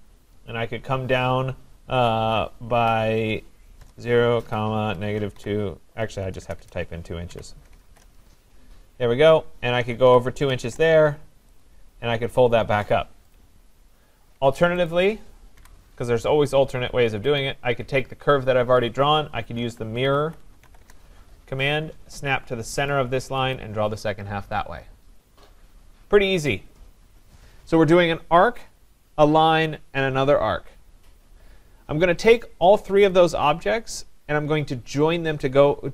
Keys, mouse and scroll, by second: 3.8-8.2 typing, 10.0 2, 10.5 shift+', 10.6 Return, 11.6 click, 13.3 click, 14.2 Escape, 14.8 click, 15.6 Delete, 17.4 click, 19.3-21.2 typing, 22.9 click, 23.5 click, 26.5 click, 31.4 click, 33.1-34.9 drag.